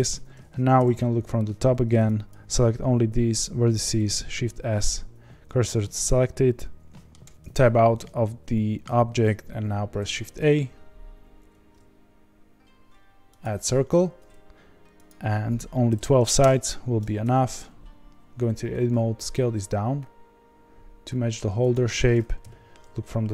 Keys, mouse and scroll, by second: 0.2 middle click, 0.7 KP_7, 2.3 click, 5.4 shift+s, 6.5-13.4 middle drag, 16.4-17.2 drag, 17.2 Tab, 18.7 s, 22.4 KP_1.